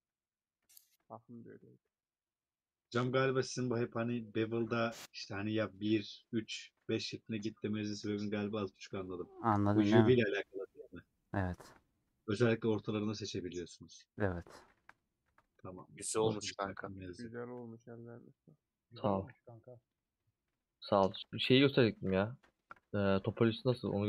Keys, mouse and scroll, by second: 0.6 /, 0.8 middle click, 1.5 Tab, 1.9 click, 2.4 scroll down 1, 2.8 middle click, 3.0 scroll down 1, 3.1 x, 3.7-5.3 middle drag, 5.3 a, 6.6 middle click, 7.3 /, 7.9 Tab, 9.5 /, 9.8 middle click, 10.2 Tab, 10.3-11.7 middle drag, 11.7 2, 12.8-14.7 middle drag, 14.7 2, 15.5-16.8 alt+drag, 16.8 ;, 17.1 middle click, 17.4 2, 18.2 middle click, 18.7 scroll up 2, 18.8-20.0 middle drag, 20.0 click, 20.5 middle click, 21.1 3, 21.1 alt+click, 22.0 a, 23.2 p, 23.5-24.0 drag.